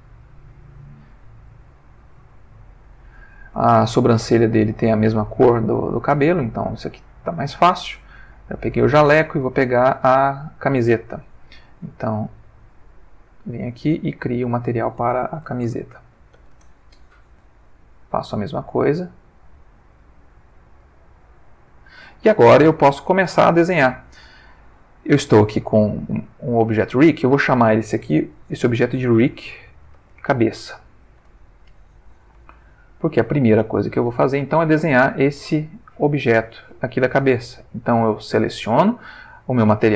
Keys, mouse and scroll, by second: 0.6 click, 1.7 click, 12.9 click, 13.7 click, 14.4 click, 15.3-16.3 typing, 16.5 shift+Return, 17.9 click, 18.7 click, 19.7 click, 20.5 click, 21.4 click, 26.1 click, 27.0 click, 29.0-30.6 typing, 31.2 Return, 32.5-34.1 ctrl+middle drag, 38.6 click.